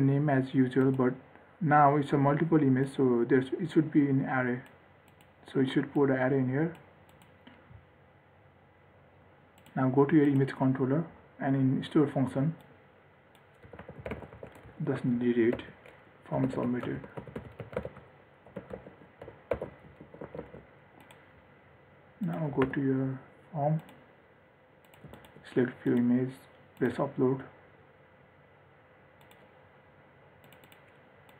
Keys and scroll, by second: 19.9 ctrl+alt+l, 20.4 ctrl+s, 23.0 ctrl+r.